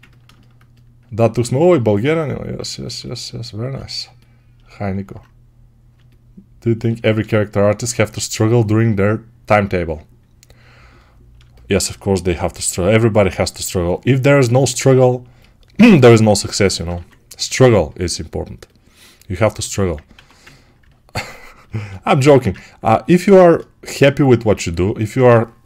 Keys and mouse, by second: 0.1-23.9 alt+shift+right drag, 16.8 2, 20.0 1, 22.4 ctrl+1, 25.1 2.